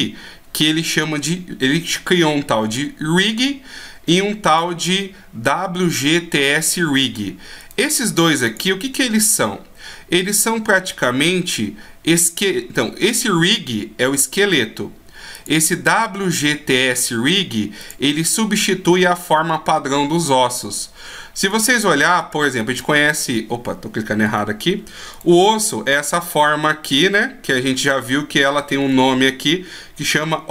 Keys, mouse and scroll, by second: 4.5 click, 7.6 right click, 9.2 click, 15.3 click, 20.4 scroll up 2, 21.6 right click, 22.2 right click, 22.8 right click, 25.1 right click, 28.5 scroll up 3.